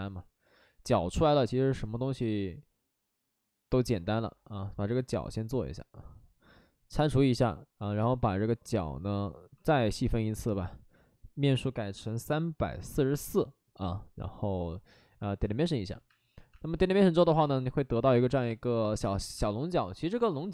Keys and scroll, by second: 4.5 2, 9.5 ctrl+d, 12.2 3, 12.6 4, 12.8 4, 13.0 Return, 15.2-17.1 typing, 19.0 space.